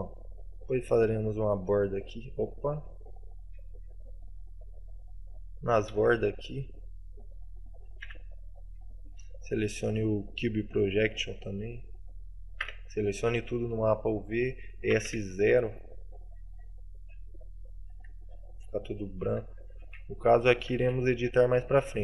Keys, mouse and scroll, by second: 0.3 middle click, 2.1-2.4 scroll up 2, 2.9 Tab, 3.7 alt+right click, 4.1 middle click.